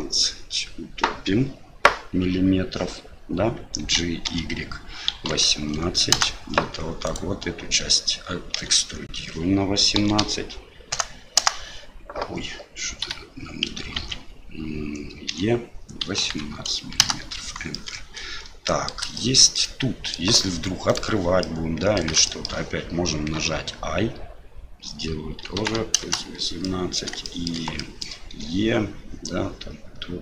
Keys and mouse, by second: 7.1 right click, 14.0 ctrl+z, 15.3 e, 17.7-18.9 middle drag, 19.1 shift+middle click, 19.6 middle click, 20.9 right click, 21.4 middle click, 22.3 shift+middle click, 26.6 click, 27.3 shift+click, 27.9 click.